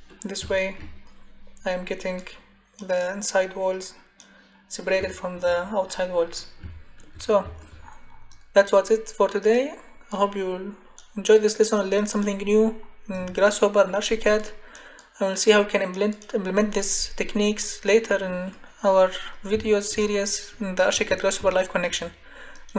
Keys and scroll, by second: 20.9 Escape.